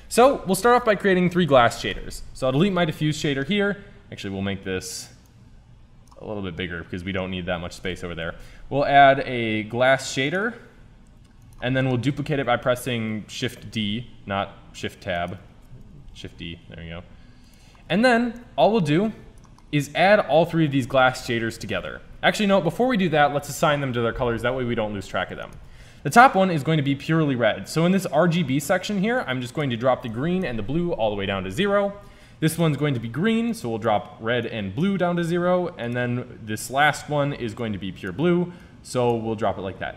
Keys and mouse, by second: 0.9-1.9 drag, 1.9 Delete, 7.8 shift+a, 12.3 shift+Tab, 13.6 shift+d, 15.6 shift+Tab, 16.0 shift+d, 18.7-20.5 drag, 21.7 shift+a, 27.3 click, 27.5-31.8 middle drag, 32.5-34.2 drag, 35.8-37.7 drag.